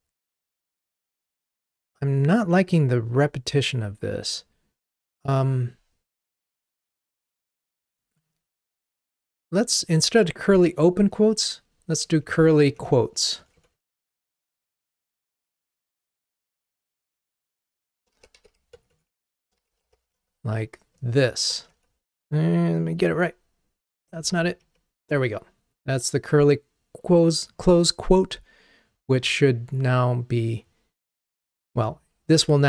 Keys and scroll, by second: 16.5 Delete, 31.7 ctrl+r.